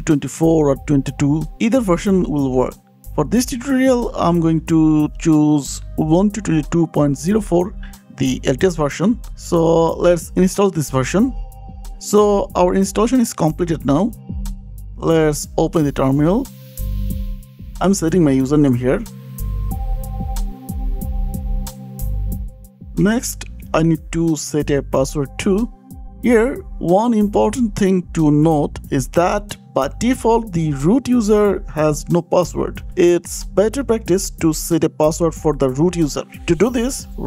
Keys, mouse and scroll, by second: 0.1 click, 0.8 click, 1.6 click, 2.9 click, 2.9-4.2 typing, 8.8-10.4 drag, 13.2 click, 16.2 click, 17.4 click, 17.6 click, 20.1 click, 21.2-24.9 typing, 23.9 KP_Enter, 25.0 KP_Enter, 26.2 click, 26.2-26.9 scroll down 5, 26.9 click, 28.0 click, 29.7 click, 30.9 click, 32.4 scroll down 1, 33.7 click, 34.3 click, 35.0 scroll, 35.1-37.0 typing.